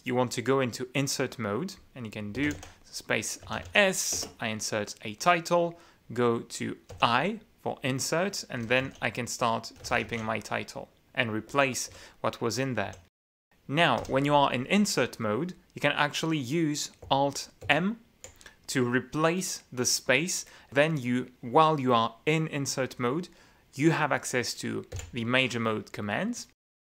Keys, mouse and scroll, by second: 2.8-4.8 typing, 7.5 i, 9.0-11.2 typing, 12.1 Escape, 12.5 u, 13.5 u, 14.6 i, 18.2 alt+m, 26.0 m.